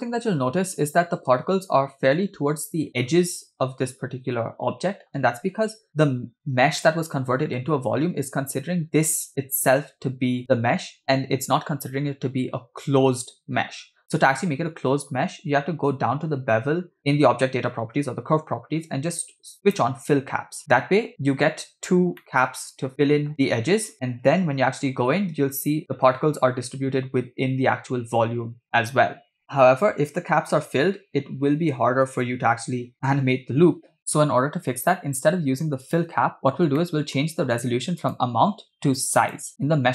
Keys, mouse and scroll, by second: 1.3 space, 5.7 KP_0, 6.8 middle click, 15.7-16.0 scroll up 2, 16.2-16.6 scroll down 3, 16.4-16.8 scroll up 2, 17.9-18.4 scroll down 2, 20.2 click, 22.2-23.5 middle drag, 23.3 scroll down 6, 24.6 KP_0, 25.5 space, 29.3 space, 29.5 space, 32.7 space, 32.9 space, 33.1 space, 36.4 click, 36.8 middle click, 38.0-39.7 drag.